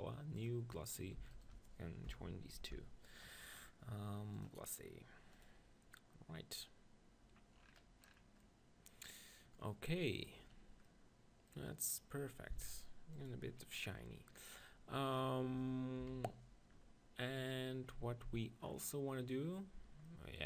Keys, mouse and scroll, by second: 0.5-3.1 drag, 2.6 ctrl+j, 5.4-7.3 drag, 7.5 middle click, 8.4-10.2 middle drag, 10.9-13.3 middle drag, 13.3-15.1 drag, 16.0 KP_1.